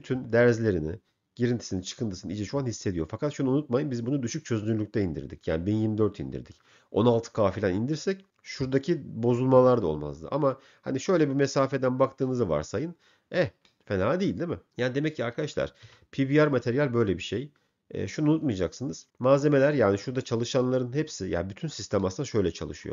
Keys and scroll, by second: 16.1 m, 18.5 m.